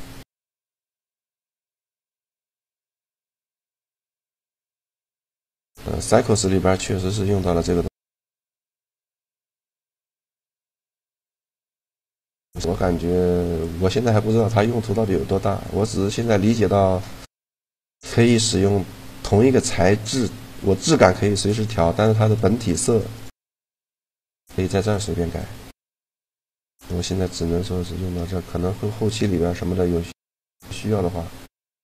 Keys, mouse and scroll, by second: 6.3-9.4 middle drag, 12.1-13.3 middle drag, 19.8-23.6 right drag, 23.6-25.1 middle drag, 24.5-26.4 drag, 24.5 right click, 26.7-28.7 middle drag, 30.1-31.8 drag.